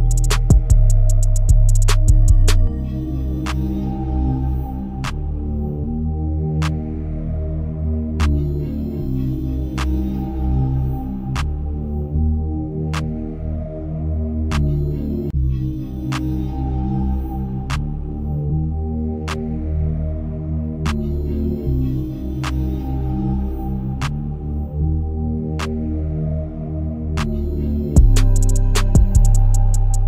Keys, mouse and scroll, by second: 1.0-2.7 shift+middle drag, 2.7 KP_Decimal, 4.5 click, 5.1-5.7 shift+middle drag, 5.7-6.3 scroll up 2, 6.3 shift+middle click, 6.9-8.7 scroll up 1, 8.7-15.3 drag, 21.5-27.7 shift+drag, 27.7 ctrl+z.